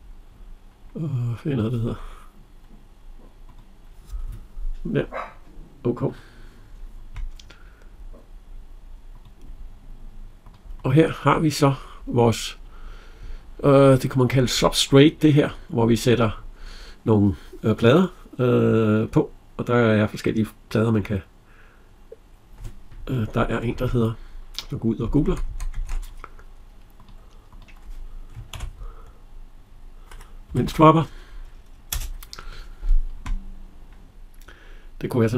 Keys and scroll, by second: 23.5 alt+Tab, 30.2 Down, 31.7 Return.